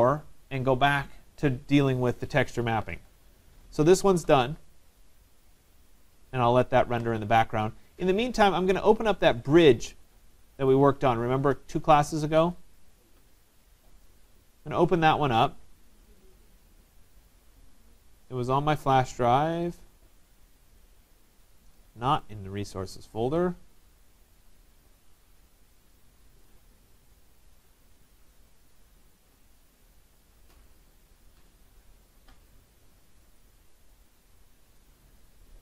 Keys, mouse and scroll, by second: 6.3 click, 9.0 click, 10.7 click, 12.6 click, 12.8 click, 16.2 click, 19.3 click, 20.9 click, 21.1 click, 22.4 click, 24.6 click, 26.3 click, 26.5 click, 28.1 click, 28.3 click, 30.9 click, 31.1 click, 32.5 click, 32.9 click, 34.9 click.